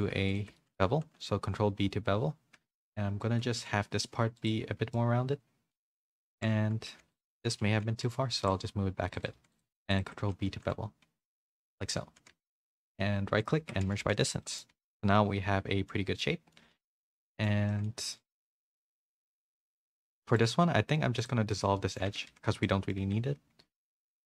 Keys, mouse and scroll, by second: 0.5 middle click, 1.0 ctrl+b, 5.0 middle click, 6.3 ctrl+z, 7.0 3, 7.4 g, 8.4 alt+s, 9.3 2, 9.9 shift+click, 10.4 ctrl+b, 12.1 1, 12.3 a, 13.4 right click, 13.6 Tab, 13.8 a, 14.1-15.9 middle drag, 14.1 a, 14.9 a, 16.2 middle click, 16.8 a, 16.8 a, 17.0 middle click, 18.3 Tab, 18.5 middle click, 19.6 2, 20.2 middle click, 20.4 x, 21.5 middle click, 22.1 Tab, 22.3 a, 22.5 a, 22.6 middle click, 23.0 Tab, 23.7 middle click.